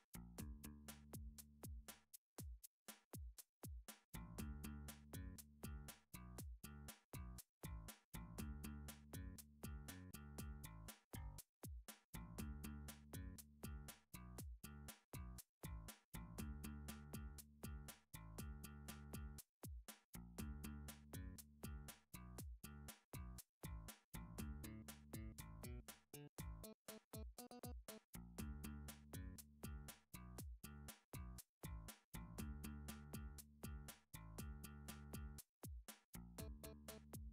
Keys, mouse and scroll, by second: 0.1 click, 1.1 shift+d, 2.6 click, 3.2 r, 4.1 click, 4.5 s, 5.9 click, 6.5 g, 7.6 click, 7.9-9.0 scroll, 9.1 a, 9.7 middle click, 13.1 middle click, 13.3 middle click, 13.8 shift+middle click, 13.8 shift+middle click, 14.8 middle click, 14.8 shift+middle click, 15.6 click, 16.3 click, 17.6 Tab, 18.2 Tab, 19.6 middle click, 19.8 middle click, 20.6 alt+click, 22.7 e, 23.8 click, 25.1 r, 25.9 click, 26.5 s, 27.2 click, 27.6 middle click, 27.7 middle click, 31.5 middle click, 32.5 a, 33.3 7, 33.3 middle click, 33.5-34.7 middle drag, 34.9 s, 36.6 x.